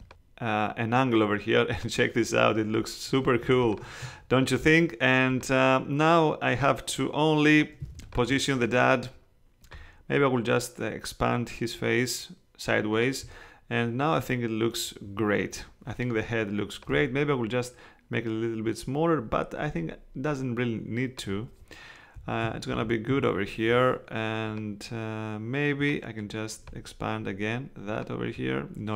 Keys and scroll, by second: 3.4 super+space, 7.8 space, 22.4 Right, 22.7 Down, 23.1 Right.